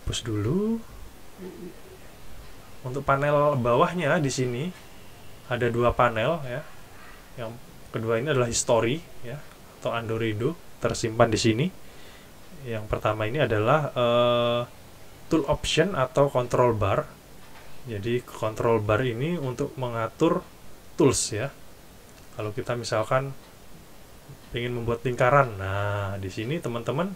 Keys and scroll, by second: 0.0 shift+super+F11.